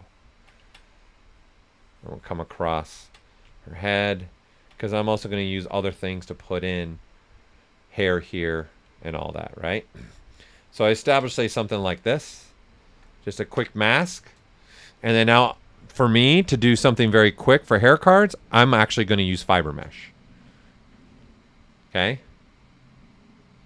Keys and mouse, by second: 0.8 ctrl+right click, 1.3-3.2 ctrl+drag, 3.2 ctrl+right click, 3.8 ctrl+click, 4.4 ctrl+right click, 9.2 ctrl+alt+click, 11.3 ctrl+right click, 13.4 alt+right click, 15.5 click.